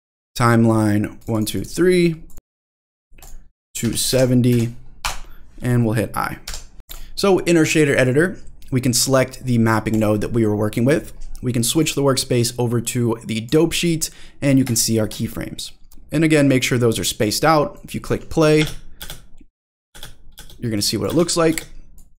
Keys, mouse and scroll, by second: 1.2 click, 1.5 click, 2.2 click, 3.2-5.5 drag, 6.9 click, 7.2-7.9 scroll down 1, 9.9 click, 11.7-13.5 drag, 14.0-14.5 scroll up 4, 14.8 shift+middle click, 15.3-15.9 scroll up 2, 15.9-17.2 drag, 17.7 click, 18.5 space, 19.0 space, 19.6 drag, 20.3 space, 20.8 drag, 21.5 space, 22.0 click.